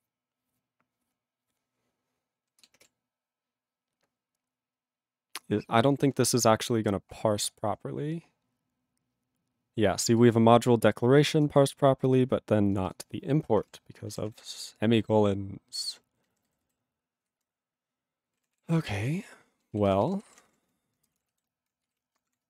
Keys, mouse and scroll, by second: 2.3-2.9 scroll down 1, 13.8-14.2 scroll down 1, 14.2 ctrl+s, 14.4 ctrl+p, 16.2 ctrl+n, 17.2 ctrl+f, 18.5 ctrl+s, 18.8 ctrl+space, 19.3 ctrl+alt+b, 20.0-20.9 typing, 21.2 ctrl+e, 21.3 ctrl+b, 21.9 ctrl+b, 22.3-22.4 typing.